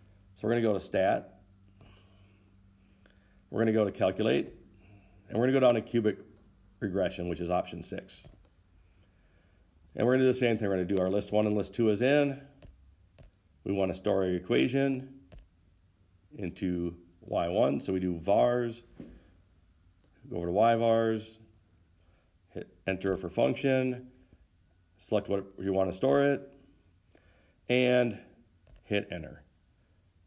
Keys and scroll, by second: 4.8 Right, 8.6 6, 13.2 Return, 13.6 Return, 17.8 Return, 21.1 Right, 23.5 Return, 26.5 Return, 29.1 Return.